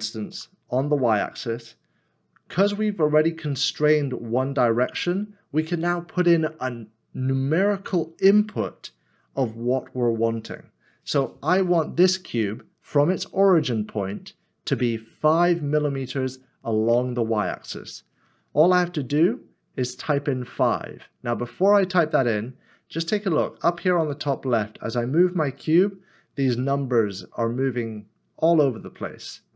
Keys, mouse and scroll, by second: 0.3 y.